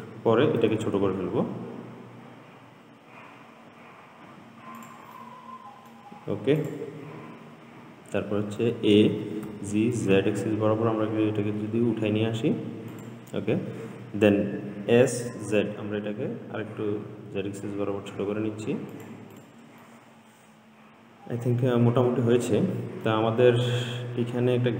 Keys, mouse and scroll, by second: 0.8 s, 5.4-6.9 middle drag, 6.9 click, 8.8 a, 9.7 g, 15.1 s, 19.6 click, 20.0-23.1 middle drag, 23.9-24.7 scroll up 4.